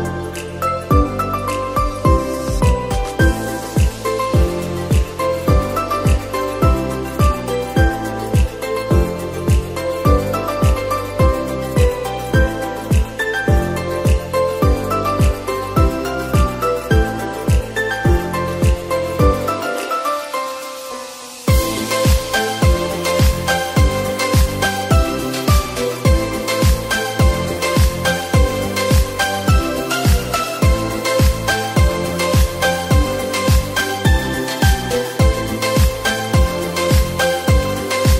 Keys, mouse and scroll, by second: 0.1 middle click, 0.4-0.7 scroll up 1, 0.7 e, 3.4 s, 5.9-7.6 middle drag, 7.6 click, 8.2-10.3 drag, 12.0-13.3 drag, 13.3 Tab, 13.5 right click, 14.1-14.9 middle drag, 14.9 click, 15.1-15.7 middle drag, 15.7 Tab, 16.8 drag, 17.2 scroll up 1, 17.3-18.4 middle drag, 18.4-19.6 scroll up 2, 19.6-20.8 drag, 21.0 alt+shift+click, 21.4 alt+shift+click, 22.1 KP_1, 23.1 e, 24.0 click, 27.2 click, 27.5 alt+shift+click, 27.8 alt+shift+click, 28.6 e, 29.8-30.8 middle drag, 30.8 s, 31.8 KP_1, 32.4 s, 35.6 click, 37.4 middle click.